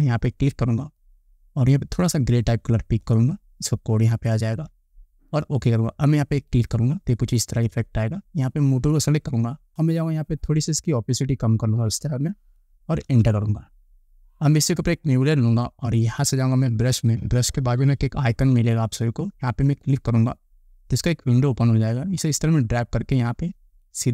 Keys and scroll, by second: 13.3 Return.